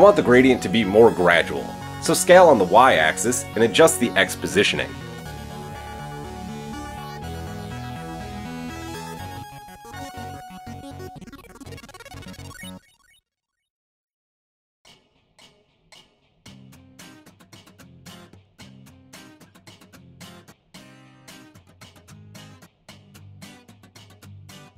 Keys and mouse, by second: 3.7-6.1 middle drag, 6.1-24.7 drag.